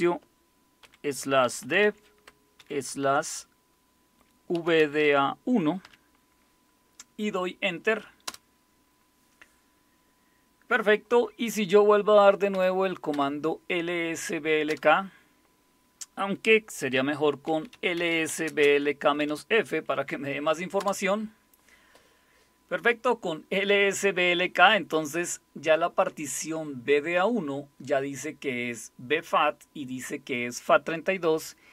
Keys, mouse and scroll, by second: 0.8-2.6 typing, 4.5-5.8 typing, 8.3 Return, 12.5 Up, 13.1 Up, 14.7 Return, 17.2-19.2 typing, 20.8 Return.